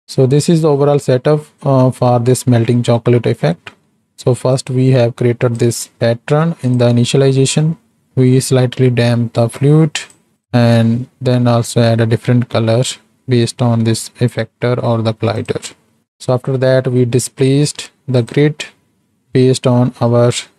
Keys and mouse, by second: 3.8 middle click, 4.6-5.7 drag, 6.7 click, 10.0 click, 10.3 click, 13.4 click, 15.3 click, 16.0 ctrl+space, 16.6 middle click, 18.2 click, 20.0 middle click.